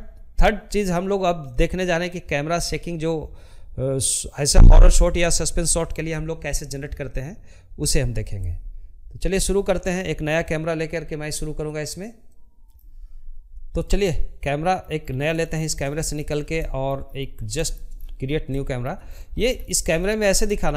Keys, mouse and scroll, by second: 11.6-12.7 middle drag, 12.7-13.1 scroll down 2, 13.1 shift+middle click, 14.1 scroll up 1, 14.3 shift+middle click, 15.1 scroll up 1, 15.3 shift+middle click, 15.7-16.2 scroll up 6, 16.2 shift+middle click, 16.7-17.3 scroll down 7, 17.3 shift+middle click, 18.1 scroll up 1, 18.3 shift+middle click, 18.6-19.2 scroll down 5, 19.2-20.7 middle drag.